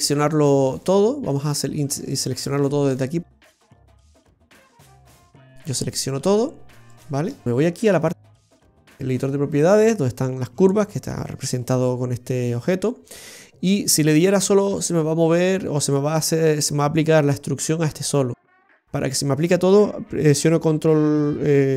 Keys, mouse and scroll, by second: 0.8 right click, 1.4 right click, 2.0 shift+right click, 2.2 shift+right click, 2.4 right click, 7.3 shift+right click.